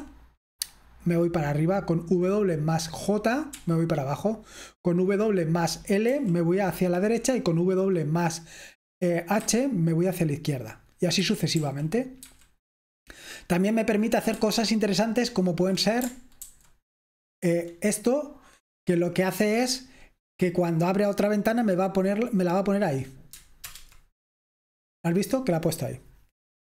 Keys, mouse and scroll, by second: 0.0-26.6 typing, 0.0 super+k, 3.7 super+j, 6.3 super+l, 9.6 super+h, 11.3 super+k, 11.6 super+l, 12.2 super+h, 16.5 ctrl+super+h, 23.8 super+Return.